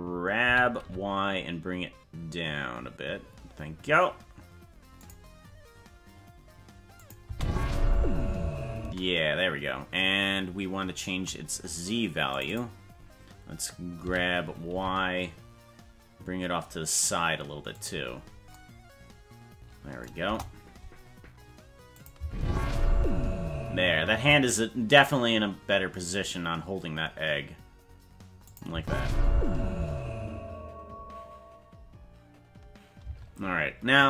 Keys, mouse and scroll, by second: 0.4 g, 7.0 click, 7.2 space, 8.8 space, 12.5 click, 14.0 g, 20.3 KP_0, 22.0 click, 22.2 space, 24.2 space, 28.5 click, 28.7 space, 33.1 space.